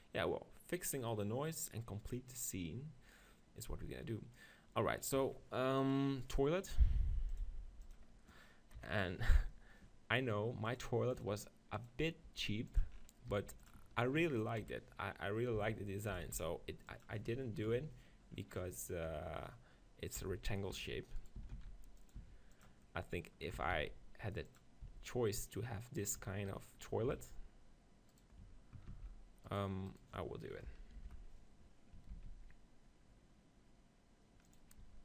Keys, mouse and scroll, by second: 7.3-8.8 drag, 8.8 KP_7, 9.4 z, 9.8-11.0 middle drag, 11.0-12.7 drag, 12.3 g, 13.0-15.8 middle drag, 13.3 g, 14.6 KP_1, 15.6 s, 16.2 s, 17.0-18.8 drag, 17.7 ctrl+KP_1, 19.1 KP_7, 20.2 s, 21.4 s, 22.2 s, 22.9-24.6 middle drag, 23.6 s, 24.6 click, 24.9 z, 26.2 Tab, 27.1 ctrl+r, 28.3-29.4 drag, 28.9 ctrl+b, 31.0 ctrl+l, 32.3 ctrl+b, 34.6 click, 34.8 Tab.